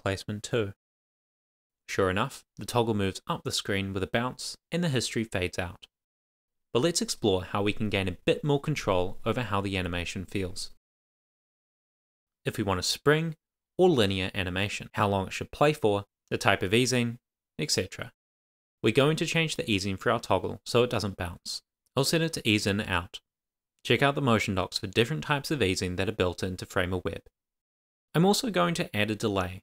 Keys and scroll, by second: 0.0 shift+[, 0.1 Return, 0.3 Down, 0.5 alt+Up, 0.7 super+s, 16.3 Return, 20.5 shift+;, 20.9 shift+[, 21.0 Return, 25.5 shift+;, 26.0 shift+', 27.4 shift+i, 27.7 shift+o, 28.4 Right, 28.7 Return, 29.5 shift+;.